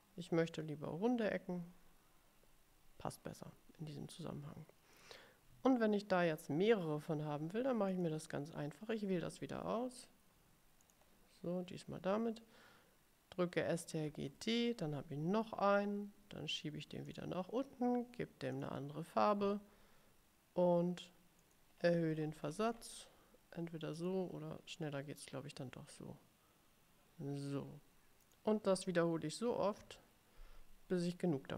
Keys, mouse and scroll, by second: 5.0 click, 8.0 click, 11.0 click, 14.2 ctrl+d, 17.2 click, 18.6 click, 21.5 click, 21.9-23.2 scroll up 3, 24.1 click, 25.3-27.8 drag, 28.3 click, 29.9 ctrl+d.